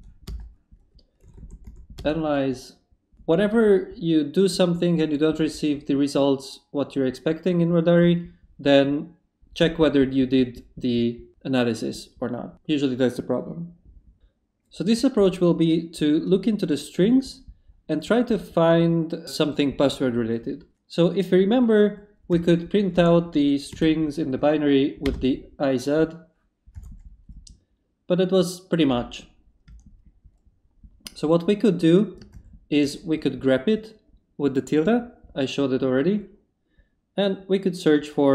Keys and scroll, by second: 0.3 Return, 1.2 a, 2.0 Return, 22.1-23.7 typing, 25.1 Return, 26.7 y, 29.7 Up, 32.3 shift+`.